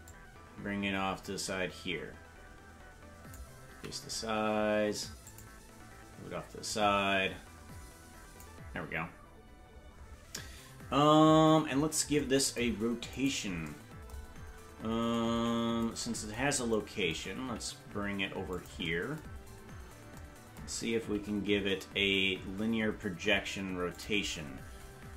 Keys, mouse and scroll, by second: 0.0-3.4 drag, 3.7 s, 6.7-8.4 drag, 8.8-9.1 scroll down 4, 13.1 right click, 14.4 scroll down 3, 17.4 g, 19.4-20.1 scroll down 9, 21.2 g.